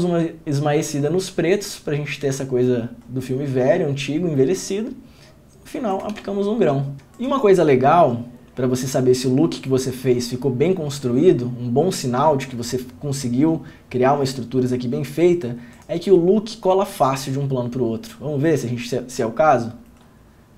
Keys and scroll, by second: 6.3 ctrl+d, 7.0 ctrl+f.